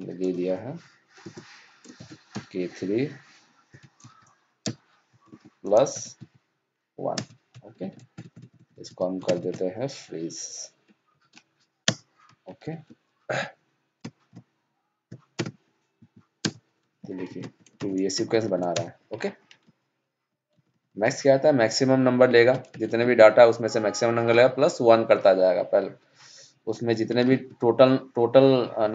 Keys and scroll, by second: 17.2 ctrl+c.